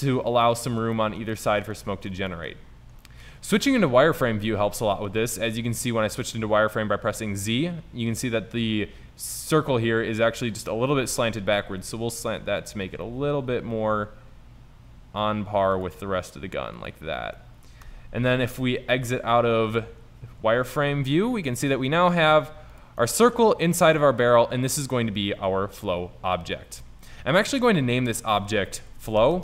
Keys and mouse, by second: 0.3 z, 11.0 r, 13.1 r, 16.2 r, 17.9 Tab, 18.5 z, 19.2 middle click, 20.7 middle click, 22.4 s, 28.1-29.4 drag.